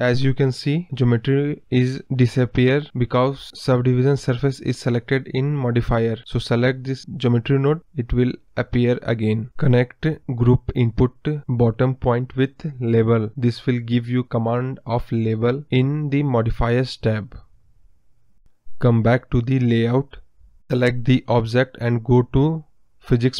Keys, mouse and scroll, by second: 1.0-2.1 scroll up 1, 2.1-14.8 drag, 20.3-22.5 drag.